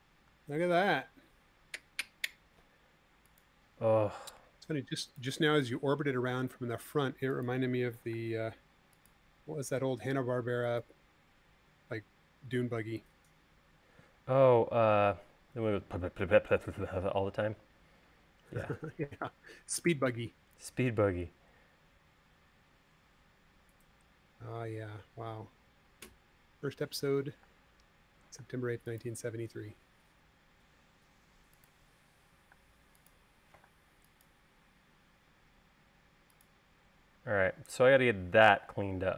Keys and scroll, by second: 2.4 l, 6.2 space, 8.4 m, 13.2 space, 27.9 space, 33.0 space.